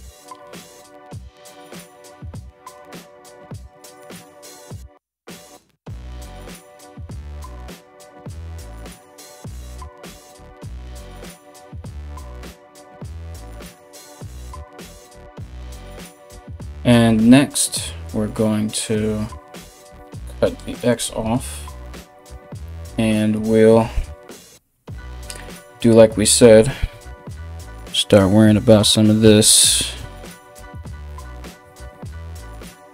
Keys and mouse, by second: 6.0-6.5 ], 7.0 ctrl+", 30.1 ctrl+z, 30.7 ctrl+z, 31.8-32.8 typing.